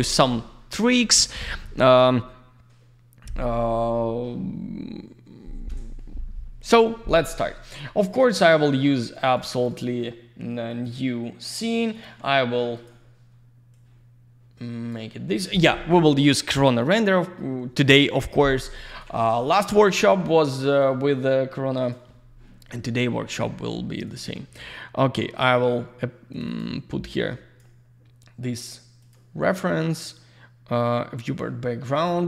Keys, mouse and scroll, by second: 7.6 click, 8.3 click, 9.1 click, 9.3 click, 9.5 click, 9.6 double click, 9.7 click, 10.7 click, 11.9 click, 12.7 click, 13.7 click, 15.3 click, 18.9 click, 20.3 click, 20.7 click, 20.8 double click, 21.8 click, 24.0 click, 26.3 click, 26.4 click, 26.6 double click, 27.1 click, 29.0 click, 30.0 click, 31.2 click.